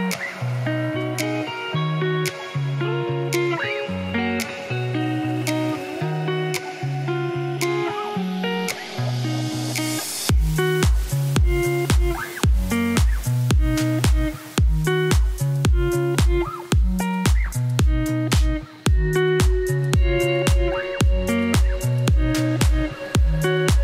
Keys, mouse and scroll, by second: 5.8-8.3 drag, 8.3-9.5 middle drag, 10.9-13.0 middle drag, 13.9 click, 14.3-14.7 scroll up 3, 14.7 shift+middle click, 15.4 shift+click, 16.1 scroll up 1, 16.7 right click, 17.4 click, 19.3-21.6 shift+drag, 21.6 shift+middle click, 21.9 scroll down 1, 22.0 middle click, 22.5 click.